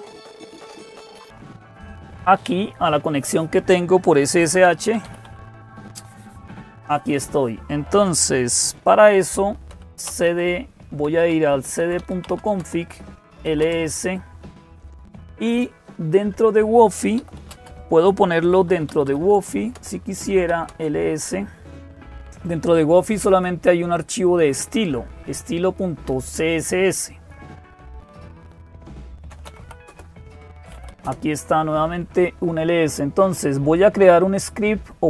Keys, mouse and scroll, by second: 0.0-35.0 typing, 0.0 click, 0.9 click, 1.7 click.